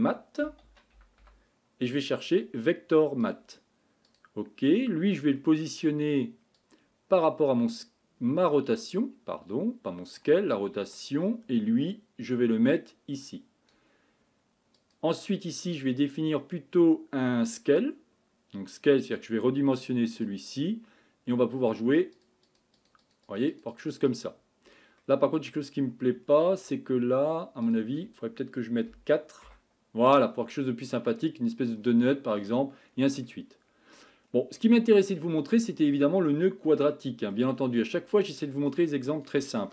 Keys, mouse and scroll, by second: 6.6-10.1 drag, 12.7-13.7 drag, 22.2-31.2 drag, 31.2-39.7 middle drag.